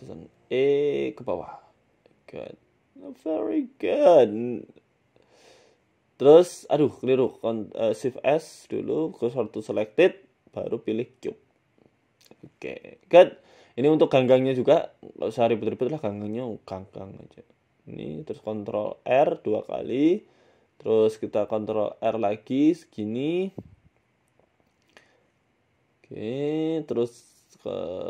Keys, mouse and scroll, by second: 0.4 scroll down 1, 0.6 s, 1.3 e, 2.4 Tab, 2.6-3.3 scroll down 2, 3.0-3.3 scroll up 1, 3.3 middle click, 3.3 scroll down 3, 3.8 middle click, 4.2 KP_1, 5.0 Tab, 5.1 scroll up 2, 5.4 shift+a, 6.5 s, 7.0 ctrl+z, 7.2 scroll down 3, 8.5 Tab, 8.5 scroll down 4, 8.9 shift+s, 9.6 shift+a, 10.2 Tab, 10.4 shift+a, 11.4 s, 12.2 scroll down 1, 12.6 scroll down 1, 13.0 scroll down 1, 13.0 s, 14.5 g, 15.7 s, 16.8 g, 17.9 ctrl+r, 18.8 s, 20.3-20.8 scroll up 4, 20.9 ctrl+r, 23.9 click, 25.2 g, 27.6 click.